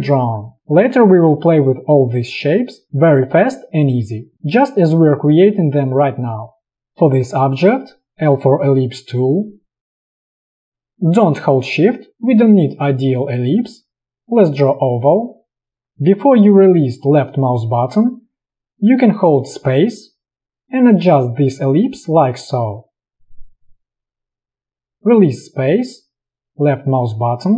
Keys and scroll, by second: 1.6 space, 8.0 l, 19.6 space.